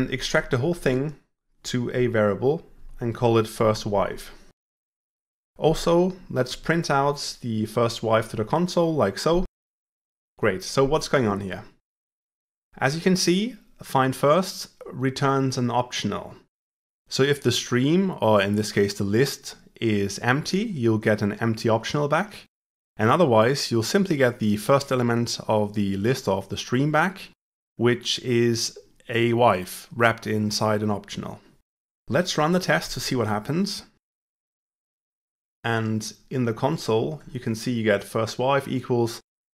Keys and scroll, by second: 1.6 ctrl+alt+v, 7.0 Tab, 32.2 ctrl+shift+F10.